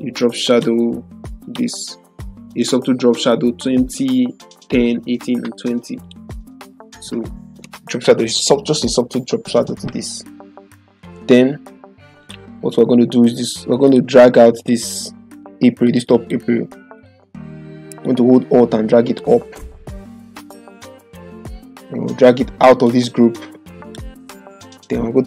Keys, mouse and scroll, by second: 0.4 click, 0.6 click, 6.0 click, 12.2 click, 15.8 ctrl+click, 16.9-19.3 drag, 21.6-22.9 drag.